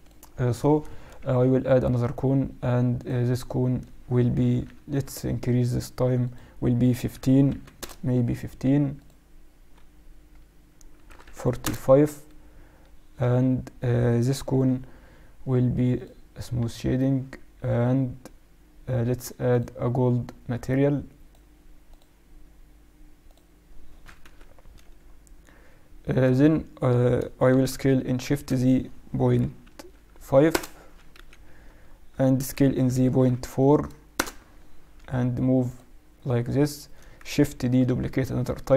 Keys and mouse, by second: 1.2 shift+a, 4.7 F6, 14.5 t, 15.9-17.7 drag, 16.5 t, 17.6-18.7 middle drag, 19.4-23.7 drag, 24.1 KP_7, 27.6 s, 31.1 KP_1, 32.4 s, 34.9 g, 37.5 shift+d.